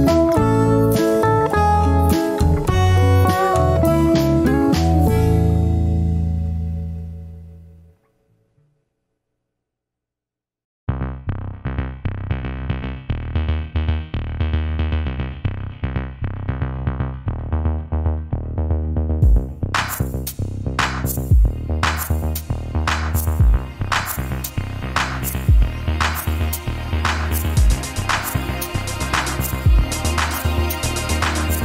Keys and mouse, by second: 3.0 ctrl+z, 4.2 ctrl+r, 10.9 click, 11.5 Tab, 12.7 Tab, 13.3-14.6 middle drag, 15.9-17.0 shift+middle drag, 18.4 ctrl+r, 30.9 Tab.